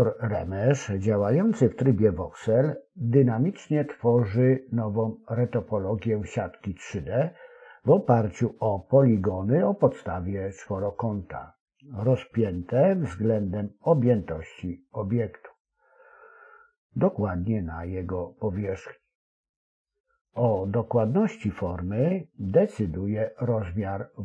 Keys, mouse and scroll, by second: 0.1 click, 2.3 g, 3.7-4.8 right drag, 6.8 click, 8.0 s, 8.9 click, 10.1 click, 10.8 shift+click, 11.7 ctrl+KP_Add, 13.0-14.1 right drag, 17.0-18.0 right drag, 19.0 ctrl+r, 21.4 click, 23.5 click.